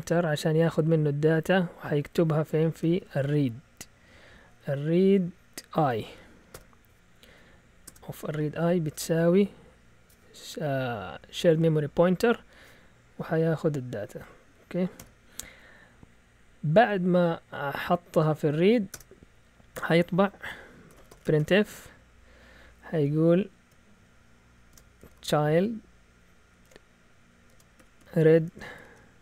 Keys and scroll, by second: 0.3 Left, 0.9 Left, 1.4 Left, 2.7-4.3 typing, 6.0-6.5 typing, 7.5-8.8 typing, 14.1 End, 14.9 ;, 16.6 Down, 18.8 Return, 20.6-21.8 typing, 24.4-28.7 typing.